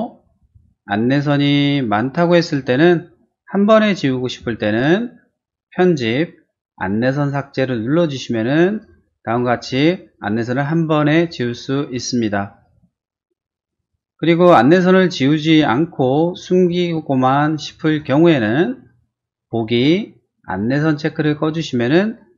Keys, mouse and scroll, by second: 0.4 t, 1.0 click, 1.2 click, 2.3 click, 2.4 click, 3.5 click, 3.7 click, 5.7 click, 8.7 click, 13.7 click, 13.9 click, 15.0 click, 15.2 click, 16.3 click, 16.6 click, 17.7 click, 17.9 click, 19.7 click.